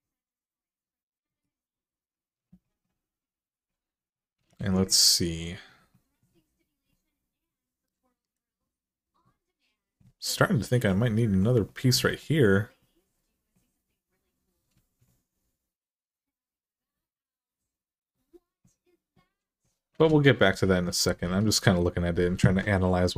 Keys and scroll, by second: 4.3 alt+z, 19.8 alt+z.